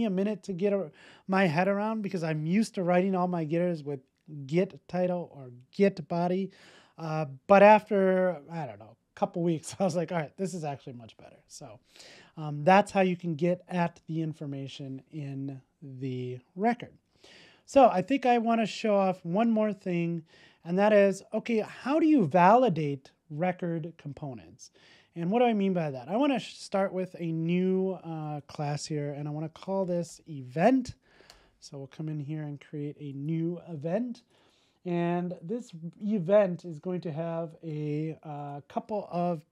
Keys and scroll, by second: 16.6 super+s.